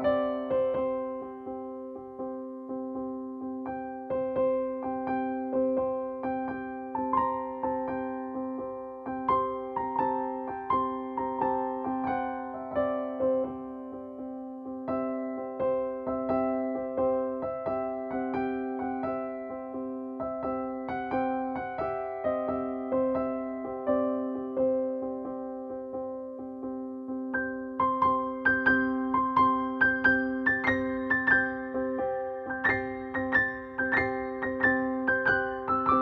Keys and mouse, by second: 0.7 click, 0.7 typing, 3.7 right click, 4.6 click, 4.6 typing, 6.7 click, 9.5 ctrl+click, 11.5 shift+Down, 15.0 shift+Down, 17.1 click, 24.3 ctrl+z, 26.9 click, 29.3 click, 31.0 click, 34.1-36.0 shift+drag.